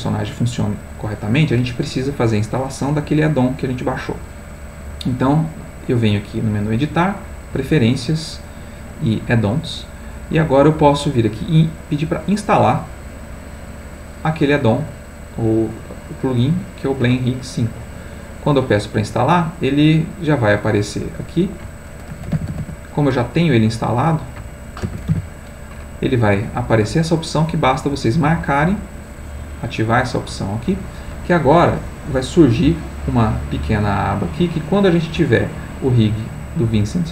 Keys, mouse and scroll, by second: 6.3 click, 7.3 click, 12.3 click, 13.8 click, 15.7 click, 16.6 click, 17.8 click, 21.2 click, 22.1 b, 22.3 l, 22.5 n, 22.6 d, 24.8 BackSpace, 25.1 r, 26.2 click, 26.7 click, 30.5 click, 34.1 click, 35.3 click.